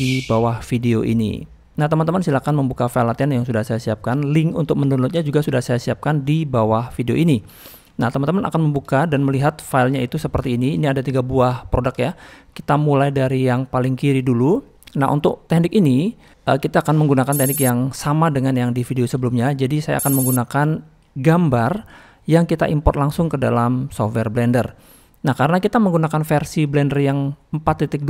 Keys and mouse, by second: 1.5 middle click, 4.9 shift+middle click, 7.2 middle click, 7.7 shift+middle click, 9.0 shift+middle drag, 9.3-10.0 middle drag, 10.6 shift+middle click, 10.8 middle drag, 12.0 shift+middle drag, 12.8 shift+middle click, 14.2 middle click, 25.6-28.0 drag.